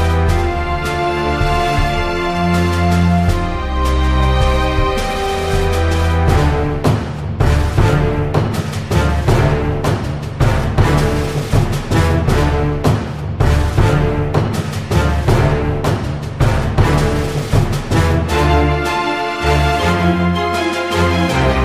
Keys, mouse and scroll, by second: 0.0-1.1 drag, 0.7 f, 1.1 ctrl+z, 1.8 click, 2.4 a, 2.6-4.2 drag, 3.0 middle click, 3.9-5.3 f, 4.6 middle click, 5.6 ctrl+z, 6.3 middle click, 7.3 click, 7.6 f, 7.8 middle click, 8.5 click, 8.8 f, 9.1 middle click, 9.6 Tab, 10.0 click, 10.8 Tab, 11.4 ctrl+r, 12.3 ctrl+r, 13.3-15.9 middle drag, 15.3 Tab, 16.1 click, 16.9 shift+d, 17.3 click, 18.1 p, 18.5 middle click, 19.0 click, 19.5 middle click, 20.0 click, 20.8 click, 21.0 Tab.